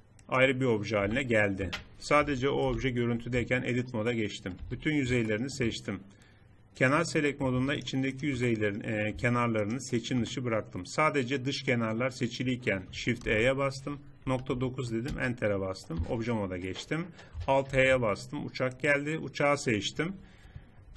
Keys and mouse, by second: 1.0 g, 2.6 shift+h, 3.3 Tab, 4.6 a, 7.7-8.7 middle drag, 11.8 middle click, 13.2 shift+e, 15.9 Tab, 17.6 alt+h.